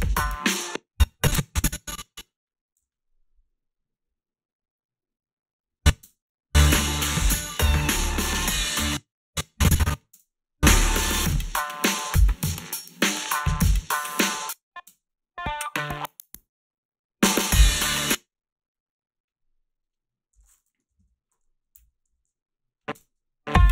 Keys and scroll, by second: 0.5 space, 2.8 g, 6.1 space, 8.7 space, 10.1 space, 14.2 space, 14.9 space, 17.9 space, 18.1 h, 20.9-23.0 typing.